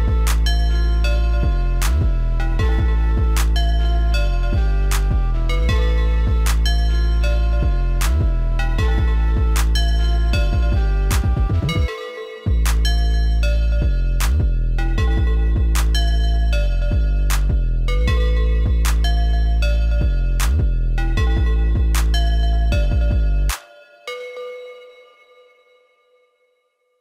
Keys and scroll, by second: 7.6 ctrl+x, 9.5 ctrl+s, 25.1 ctrl+s.